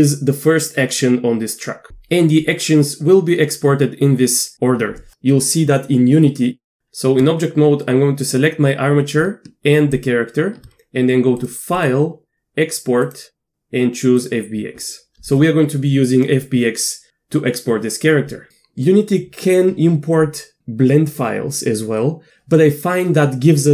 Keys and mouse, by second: 6.8 Tab, 11.8-12.1 drag, 12.8-14.3 drag.